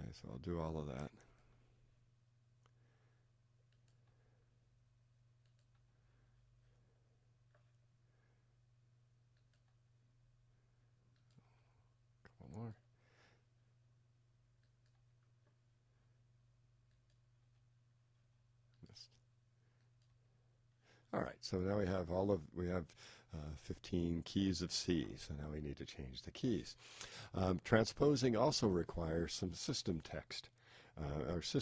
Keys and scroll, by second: 1.5 Return, 4.0 Return, 9.6 Return, 17.4 Return, 20.1 Return.